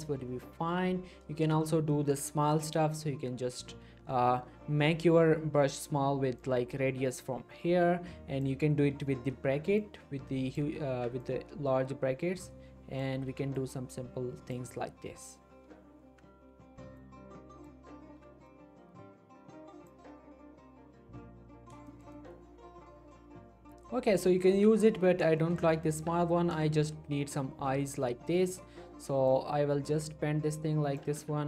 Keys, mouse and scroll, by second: 0.5 scroll up 1, 1.5-1.9 scroll down 2, 1.9 shift+middle click, 2.7-4.9 typing, 6.4-8.6 drag, 10.9 ctrl+z, 11.2-13.1 drag, 13.3 ctrl+z, 13.5-14.8 drag, 15.6-16.0 scroll down 1, 16.2 scroll up 1, 16.5 ctrl+z, 17.0-17.9 click, 18.2 ctrl+z, 18.5-20.0 drag, 20.8-21.4 scroll down 1, 21.4-21.8 scroll up 1, 21.9-24.0 shift+middle drag, 24.9-25.2 scroll up 1, 25.4 shift+middle click, 25.9 ctrl+z, 26.6 shift+scroll down 1, 27.3-27.7 scroll up 1, 27.7-28.3 scroll down 1, 28.3-29.3 scroll up 1, 29.3-31.1 drag, 31.1 ctrl+z.